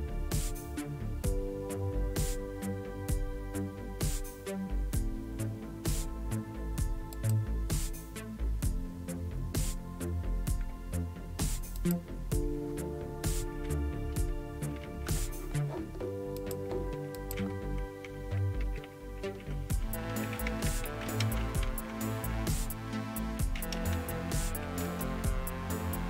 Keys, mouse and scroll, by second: 7.1 click, 11.8 click, 16.4-17.9 drag, 18.6 ctrl++, 18.8 ctrl++, 19.0 ctrl++, 19.5-26.0 typing.